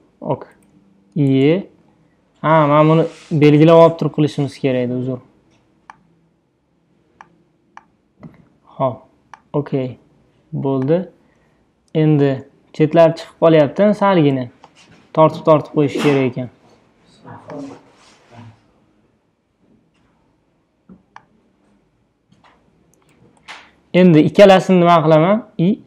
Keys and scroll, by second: 1.7 super+z, 12.3 super+d, 14.4 super+t, 23.3 Return.